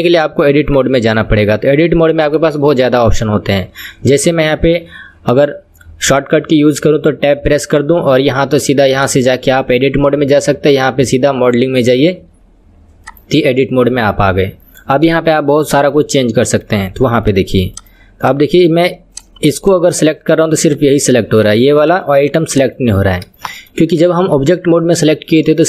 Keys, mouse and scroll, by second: 0.7 KP_1, 2.5-5.5 shift+middle drag, 9.0-12.2 drag, 13.1-14.2 drag, 14.2 middle click, 15.1 KP_1, 15.9-17.4 middle drag, 17.4 click, 17.9 click, 18.3 click, 19.2 click, 19.5 click, 19.8 click, 20.0 click, 20.9 click, 21.6 click, 22.0 click, 22.4 click, 22.7 click, 23.4 shift+middle click, 24.2 click, 25.1-25.6 middle drag.